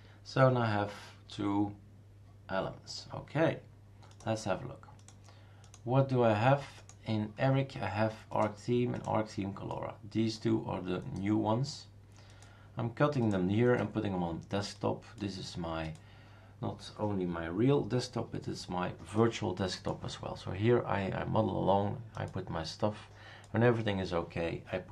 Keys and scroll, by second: 1.5 Return, 2.1 ctrl+c, 2.1 ctrl+v, 2.1 Return.